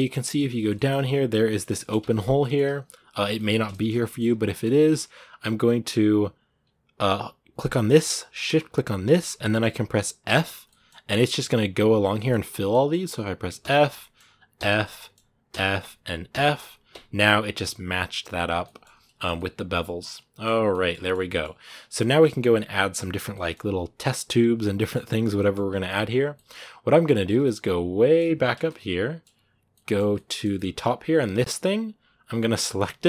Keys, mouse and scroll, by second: 0.0 middle click, 0.7 scroll up 2, 1.4 shift+middle click, 1.8 Tab, 2.2 middle click, 2.5 a, 3.1 middle click, 3.7 scroll up 2, 3.8 middle click, 4.2 Tab, 4.3 middle click, 4.7 Tab, 4.7-7.4 scroll up 2, 7.4-9.2 right drag, 9.2 middle click, 10.1 f, 10.5-13.4 middle drag, 13.4 f, 13.8 middle click, 14.4 f, 14.6 middle click, 15.3 f, 18.3 scroll down 2, 18.4-19.8 middle drag, 19.8 scroll down 2, 19.9 middle click, 20.4 scroll down 1, 20.5 shift+middle click, 21.4 scroll down 2, 21.7 middle click, 21.8-22.7 scroll up 2, 22.7-23.1 scroll up 1, 23.1 middle click, 23.4-23.8 scroll up 2, 23.8-25.5 middle drag, 25.5-26.1 scroll down 2, 26.1 middle click, 26.8-27.2 scroll down 2, 27.2-28.2 shift+middle drag, 28.2 scroll down 1, 28.5-30.7 shift+middle drag, 30.7-31.5 scroll up 1, 31.7-32.3 scroll down 2, 32.3-33.0 shift+middle drag.